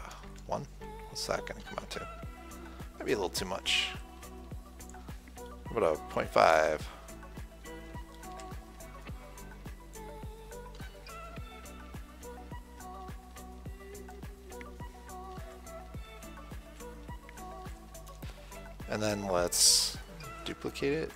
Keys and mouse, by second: 8.6 KP_7, 10.3-13.1 drag, 13.1-15.7 middle drag, 15.7 KP_1, 15.8 middle click, 16.3 KP_7, 16.9 KP_3, 20.5 ctrl+d.